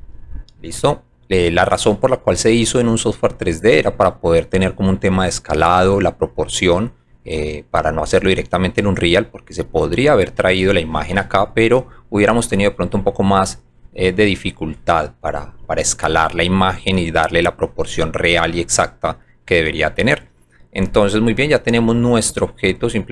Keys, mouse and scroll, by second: 0.1 click, 1.1 alt+click, 21.5 alt+click, 22.6 alt+right click.